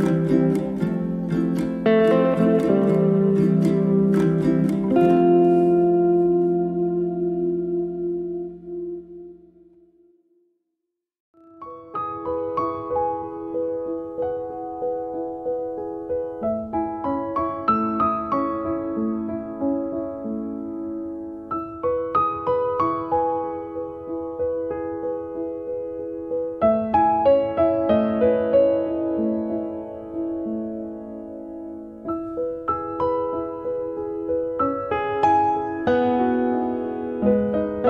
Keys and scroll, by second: 0.1 2, 0.3 KP_Decimal, 0.6 4, 1.7 space, 3.8 space, 6.9 2, 7.2 KP_Decimal, 8.9 4, 9.0 Return, 13.1 q, 15.6 9, 15.9 0, 16.3 Return, 17.9 space, 19.3 m, 27.6 2, 28.0 Return, 31.1 2, 31.5 Return, 32.4 space, 34.4 b.